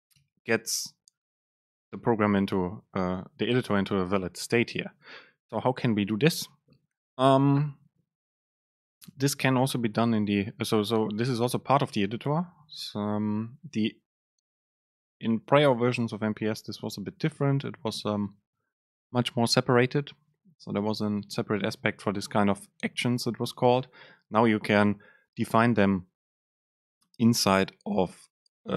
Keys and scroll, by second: 1.4 Return.